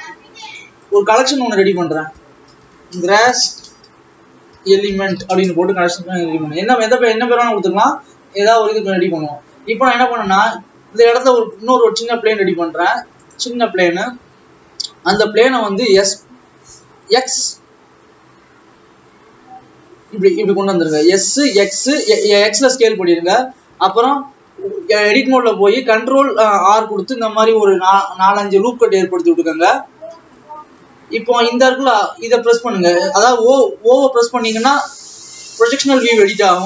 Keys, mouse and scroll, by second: 0.5-1.7 right drag, 1.7-3.5 drag, 3.5 s, 7.1 ctrl+s, 7.5 click, 8.6 click, 9.2 scroll up 1, 9.8 scroll down 2, 10.5 shift+a, 12.6 s, 13.7-14.2 scroll up 3, 14.2 KP_7, 14.7-15.5 scroll up 6, 16.0 s, 22.2-22.9 scroll up 1, 22.9 ctrl+s, 23.2 Tab, 24.2 alt+a, 24.7 ctrl+r, 31.2 Escape, 34.5 o, 36.3-36.6 drag.